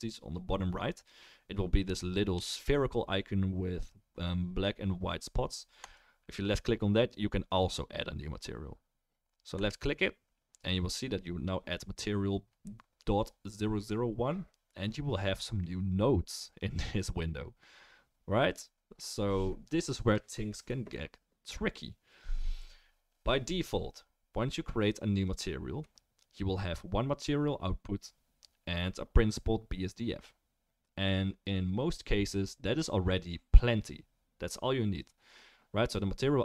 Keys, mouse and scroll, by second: 5.9-9.5 drag, 25.3-28.3 drag, 28.3-36.4 middle drag, 28.3-36.4 right drag.